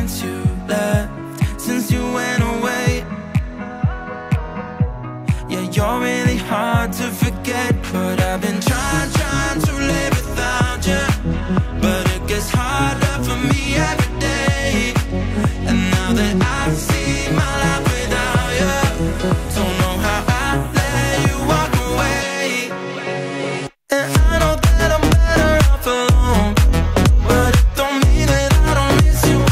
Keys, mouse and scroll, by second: 0.2-1.5 drag, 1.7 middle click, 2.2-3.9 scroll up 1, 3.9 scroll up 1, 3.9-5.4 drag, 5.7 click, 7.6 click, 8.7-10.7 drag, 11.0 middle click, 11.8-14.6 drag, 18.4 middle click, 19.0-21.1 drag, 23.5 ctrl+s, 24.8-26.9 drag, 27.9 click.